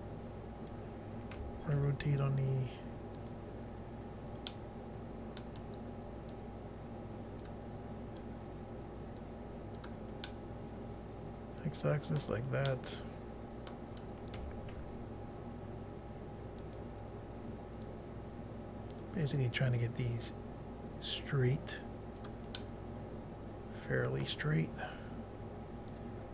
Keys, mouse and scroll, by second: 1.4-2.2 typing, 3.2 click, 4.5 middle click, 6.4 click, 8.2 click, 10.3 middle click, 12.7 middle click, 14.4-14.8 typing, 16.6 click, 16.8 click, 17.9 click, 20.3 click, 22.6 middle click, 25.9 click, 26.1 click.